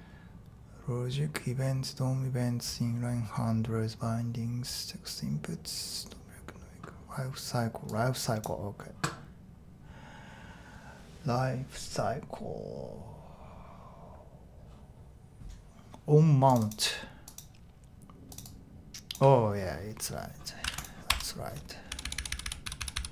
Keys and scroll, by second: 21.1 Tab, 21.6-23.1 typing.